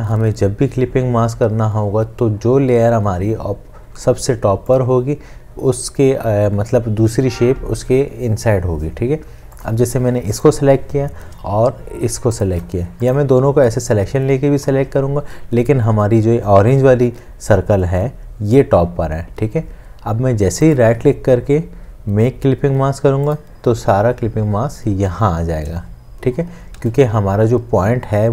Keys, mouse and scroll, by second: 12.5 shift+click, 20.7 right click, 26.8 ctrl+z.